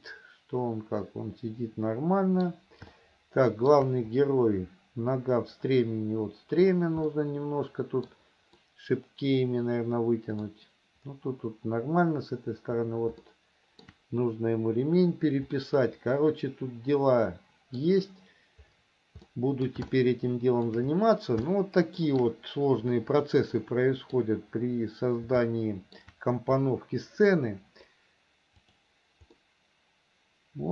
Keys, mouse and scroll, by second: 3.3 shift+middle click, 7.5-8.5 middle drag, 9.0-10.8 middle drag, 13.6 shift+middle click, 16.0-18.2 middle drag, 19.6 middle click, 20.3 shift+middle click, 21.9 shift+middle click, 22.4 middle click, 23.8 middle click, 25.8 shift+middle click, 28.8 click, 29.6-30.7 middle drag.